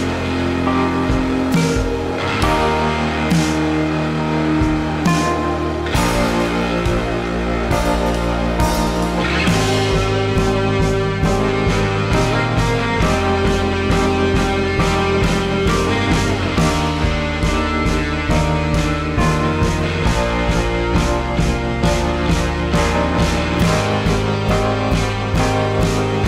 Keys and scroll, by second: 1.7 typing, 3.6 typing.